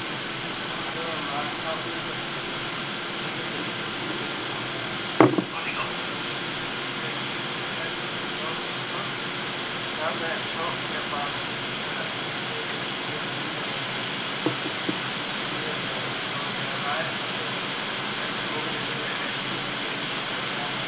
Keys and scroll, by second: 0.9 d, 2.7 e, 7.0 w, 12.6 e, 13.5 w, 20.3 e.